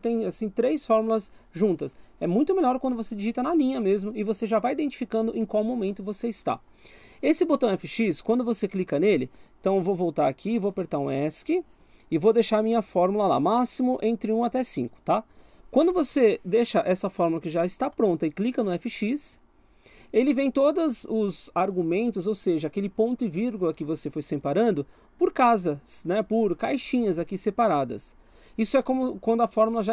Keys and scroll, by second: 11.3 Escape, 15.3 Escape.